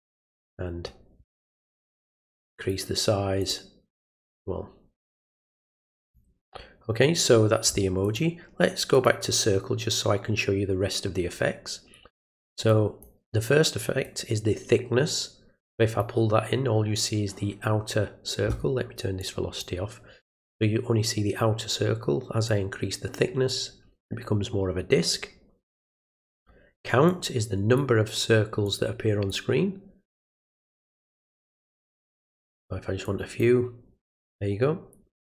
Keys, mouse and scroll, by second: 2.6 click, 3.4 click, 6.0 click, 8.0 click, 8.9 click, 12.7 click, 14.0-16.0 drag, 19.2 click, 22.5-26.4 drag, 27.1 click, 28.6 click, 30.7 click, 32.0 click, 33.0 click.